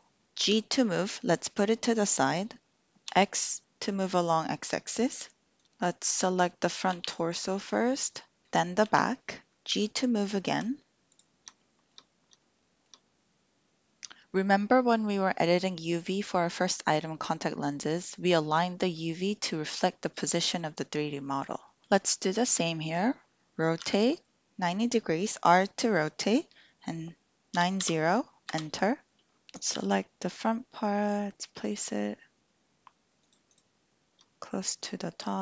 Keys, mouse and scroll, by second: 0.2 Escape, 0.4 g, 3.0 x, 6.9 l, 8.8 l, 9.7 g, 11.1 click, 11.7 shift+click, 12.6 shift+middle click, 23.8 r, 27.4 KP_9, 27.7 KP_0, 28.5 Return, 29.4 l, 29.7 g, 33.2 click, 34.5 shift+click.